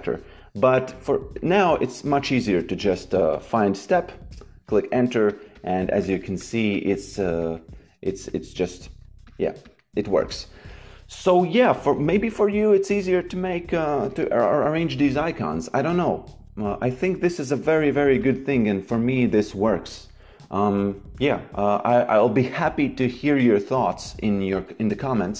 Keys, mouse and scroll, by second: 0.8 click, 2.4 shift+c, 2.7 s, 4.2 KP_Enter, 5.2 click, 18.1 click.